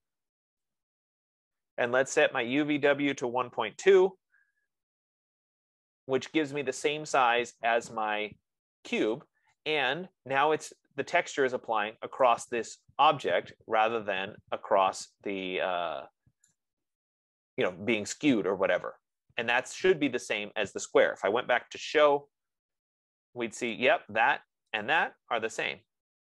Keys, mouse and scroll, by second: 1.0 typing, 2.8 click, 3.8-4.8 typing, 12.6 right click, 13.6 scroll, 16.9 right click, 17.5 middle click, 20.0 middle click, 21.6-22.6 typing, 22.4 scroll, 24.0 click, 25.2 click.